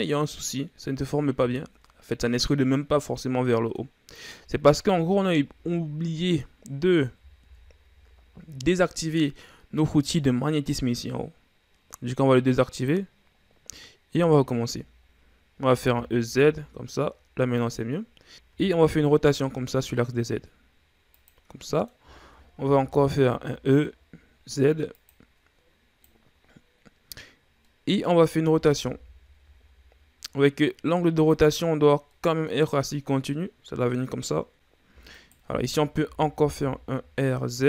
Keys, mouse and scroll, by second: 5.2 ctrl+z, 7.7 ctrl+z, 13.0 click, 14.5 a, 16.0 e, 18.3 ctrl+z, 18.8 r, 21.9 middle click, 22.5-22.9 shift+scroll up 4, 22.9 e, 28.2 middle click, 29.1 r, 32.6-35.6 middle drag, 35.6 alt+right click, 36.5 r.